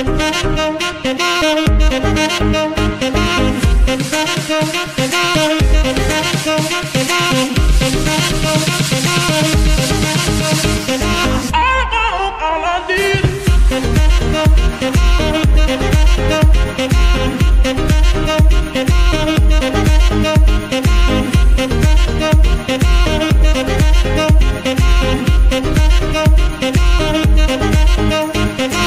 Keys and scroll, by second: 5.6 shift+KP_1, 7.0 g, 7.9 x, 13.0 g, 13.2 y, 20.2 g, 23.0 KP_3, 23.4 Tab, 23.9 s, 24.8 Tab, 25.1 s, 26.3 KP_Decimal, 28.5 g, 28.7 y.